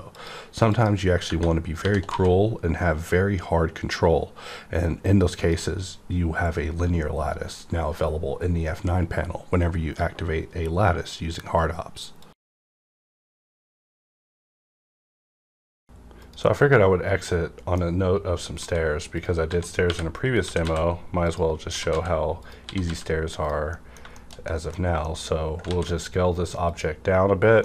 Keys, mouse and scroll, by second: 1.2 Tab, 1.8-2.1 typing, 3.9-5.4 typing, 5.4 click, 16.5 click, 16.6-19.1 middle drag, 18.5-20.6 typing, 19.1 click, 20.3 click, 21.2 click, 21.6-22.8 typing, 22.4 click, 23.4 click, 23.6 middle click, 23.7 middle click, 23.7 click, 24.2 shift+middle click, 24.7 scroll down 1, 25.0 middle click, 25.0 middle click, 25.3 scroll up 1, 25.6 ctrl+a, 26.6 click, 27.5 middle click.